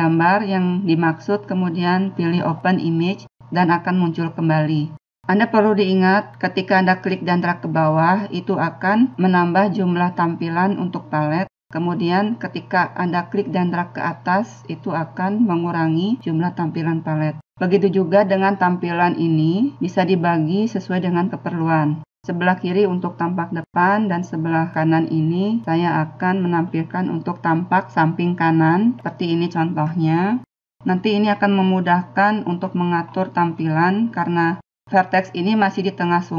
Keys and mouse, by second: 0.0 click, 18.1-19.3 drag, 25.5 middle click, 26.1-27.5 middle drag, 27.5 click, 28.5 middle click, 28.6 click, 29.1 middle click, 29.1-31.2 drag, 31.3-36.3 middle drag.